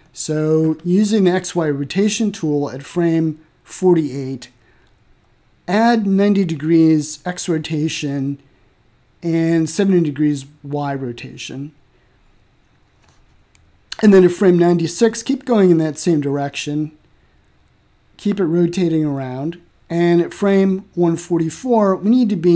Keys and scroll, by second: 9.2-10.1 typing, 12.8 7, 13.4 0, 14.3 Return.